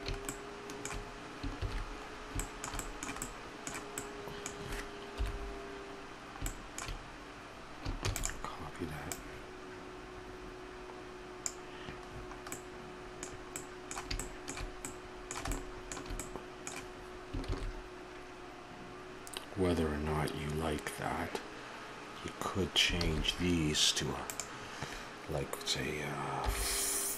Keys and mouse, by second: 7.9 KP_7, 7.9 shift+d.